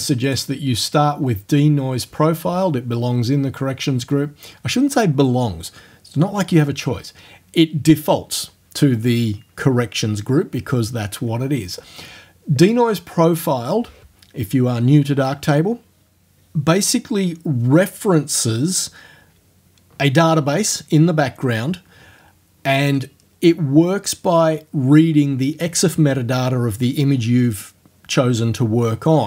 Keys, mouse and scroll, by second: 0.3 click, 12.7 click.